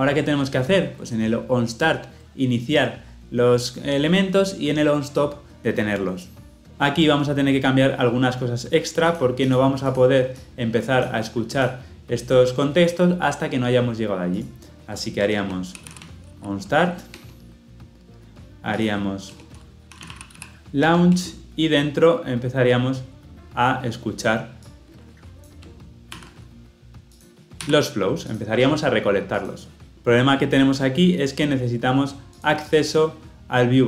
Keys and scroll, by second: 20.8 Return, 26.0 ctrl+c, 27.4 ctrl+v.